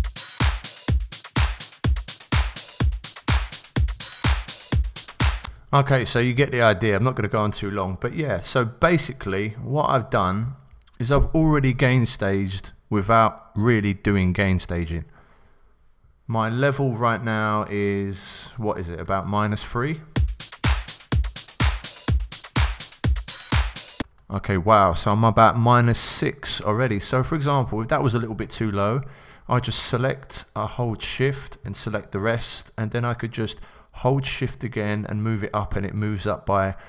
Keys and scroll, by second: 3.9 x, 8.1 b, 10.4 x, 19.0 Return, 20.1 s, 24.0 Return.